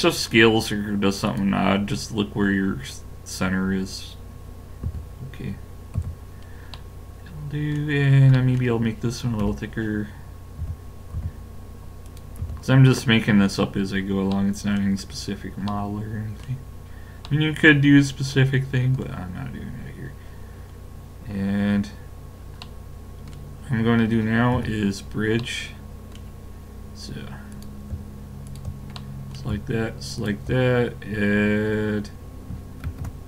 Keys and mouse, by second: 4.9 a, 5.4 middle click, 6.0 z, 9.5 l, 10.5 middle click, 10.6 s, 12.4 a, 19.1 middle click, 21.2-22.6 middle drag, 24.5 KP_5, 27.2 middle click, 27.5 click, 29.0-31.9 middle drag, 31.9 click, 32.9 ctrl+e.